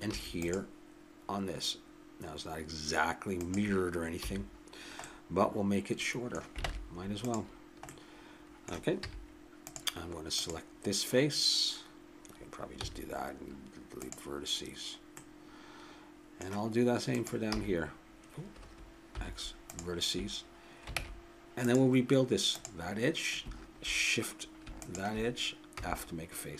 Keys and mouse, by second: 0.0 ctrl+r, 4.2 a, 6.6 ctrl+Tab, 9.0 z, 10.4-12.2 drag, 12.8 x, 17.1-18.8 drag, 17.5 c, 19.1 x, 21.0 ctrl+Tab, 22.5 click, 25.7 f.